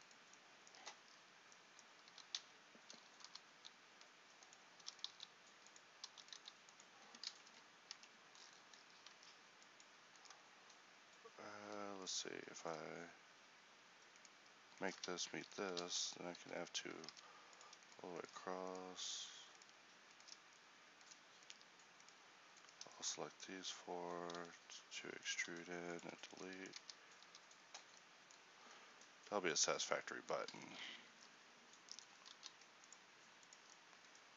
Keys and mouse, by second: 2.1 e, 4.8 e, 5.1 s, 6.1 e, 6.3 s, 7.3 Tab, 8.0 Tab, 9.2 ctrl+t, 12.5-15.1 right drag, 15.1 f, 15.7-17.1 f, 17.1 ctrl+t, 20.6-24.4 middle drag, 24.4 e, 25.5 x, 26.3 Tab, 26.9 ctrl+c, 27.3 ctrl+t, 31.1 Tab, 32.3 ctrl+r.